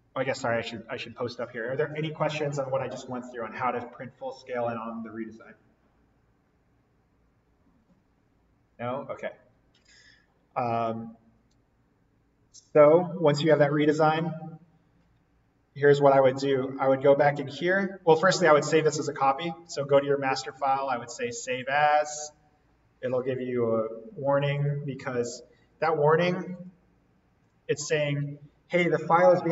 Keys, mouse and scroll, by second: 0.5 click, 16.1 click.